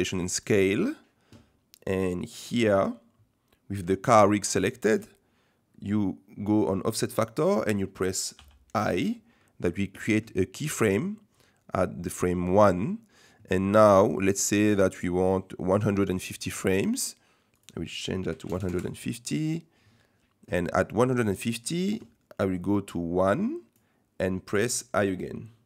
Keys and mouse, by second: 8.3 i, 16.0 click, 17.6-19.1 drag, 22.6-23.8 drag.